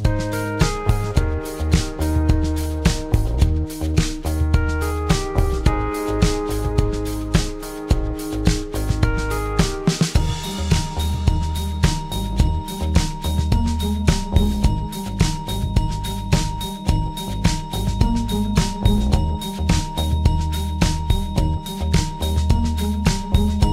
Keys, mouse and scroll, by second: 2.2 click, 6.2 click, 23.0 click.